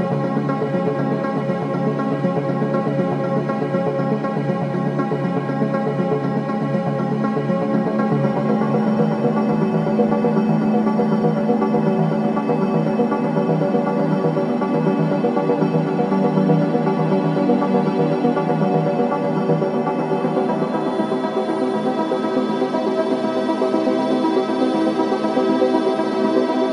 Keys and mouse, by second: 2.2 i, 4.6 click, 6.1 Right, 6.3 Right, 6.5 Right, 6.7-12.3 Right, 8.3-9.0 s, 9.7 click, 10.4 i, 11.0 click, 11.8 click, 12.7 shift+d, 13.5 click, 13.9 click, 14.1 space, 15.3 click, 15.3 space, 15.4 space, 15.8 space, 16.8 space, 17.1 click, 18.9 space, 19.6 ctrl+alt+click, 20.8 ctrl+alt+click, 23.8-26.7 drag.